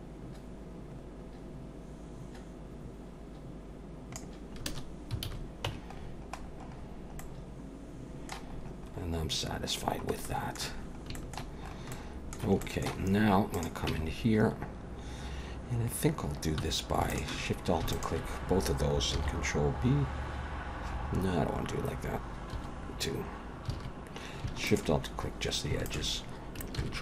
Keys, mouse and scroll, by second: 5.2 alt+a, 5.7 Tab, 6.0-7.9 scroll down 11, 7.2 middle click, 8.5-9.5 scroll up 5, 9.5-9.8 scroll down 1, 9.8-11.1 scroll down 7, 10.2 middle click, 11.1 shift+middle click, 11.6-12.6 scroll up 2, 11.9 middle click, 12.6 shift+middle click, 13.0-13.5 scroll up 2, 13.5 click, 13.9 Tab, 16.6 1, 17.1 alt+shift+click, 17.9 alt+shift+click, 19.1 ctrl+b, 22.6 2, 23.7 alt+a, 24.7 alt+shift+click, 25.1-25.7 scroll up 3, 25.9 alt+shift+click, 26.8 ctrl+b.